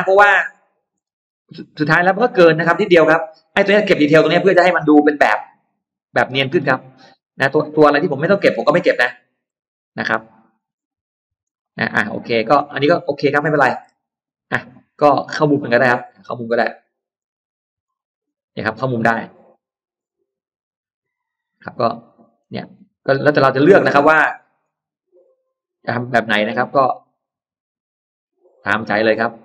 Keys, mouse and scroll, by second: 0.4 click, 0.8-1.1 scroll down 1, 2.4 scroll down 1, 3.8 middle click, 4.6-4.9 scroll down 1, 5.5 scroll up 1, 5.6-7.2 middle drag, 7.3-7.9 scroll down 1, 8.2-8.8 scroll up 2, 9.2-9.5 scroll up 2, 9.3-10.4 middle drag, 10.4-10.8 scroll down 2, 11.3-12.4 middle drag, 13.1 scroll down 2, 13.4 middle click, 13.7 scroll down 2, 15.3 click, 16.2 click, 17.0 click, 17.7 click, 18.6 click, 19.4 click, 20.2 click, 20.8 click, 21.4 scroll down 2, 21.8 scroll up 2, 21.9 middle click, 22.1-22.5 scroll down 2, 22.6 scroll up 2, 23.2 scroll down 2, 23.7-24.0 scroll up 2, 24.4 click, 25.2 click, 25.7 scroll up 2, 26.2 click, 26.7 click, 27.8 click, 28.5 click, 28.9 middle click, 29.2 click.